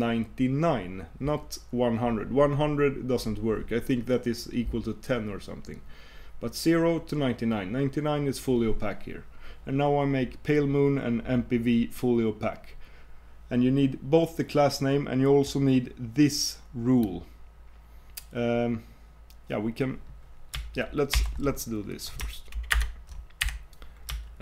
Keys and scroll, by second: 22.7 super+Return.